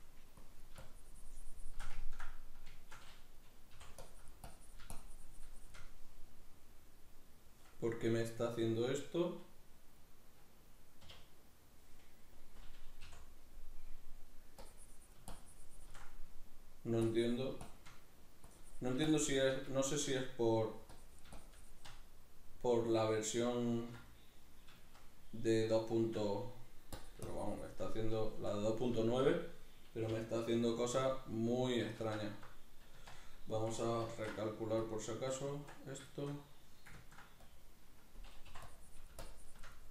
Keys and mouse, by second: 0.4-2.0 drag, 2.0-4.0 ctrl+middle drag, 4.0-5.9 drag, 5.9-14.7 middle drag, 11.1 k, 14.7-16.2 drag, 16.2 middle click, 17.1 click, 18.0 middle click, 18.5-19.7 drag, 19.7-20.9 shift+middle drag, 20.9-22.5 drag, 22.5-27.0 middle drag, 27.0 shift+click, 27.9-30.0 middle drag, 30.0 k, 30.9 click, 31.4 middle click, 32.0 ctrl+z, 34.1 ctrl+a, 35.4 Tab, 36.1-37.5 shift+middle drag, 37.5-38.5 drag, 39.3 shift+click, 39.7 middle click.